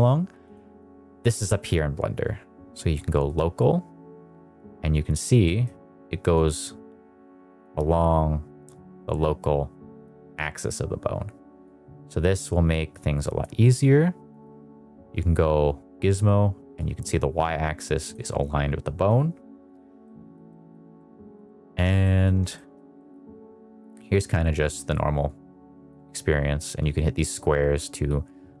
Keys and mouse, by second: 0.5-4.1 drag, 5.4 middle click, 6.3 click, 8.6 click, 8.8 click, 11.6 click, 12.9 click, 14.2 click, 16.7 click, 16.9 click, 19.0 click, 19.9 middle click, 20.4 middle click, 20.9 middle click, 21.4 middle click, 22.0 middle click, 22.4 shift+middle click, 22.9 middle click, 23.8 click, 25.1 click, 26.8 click.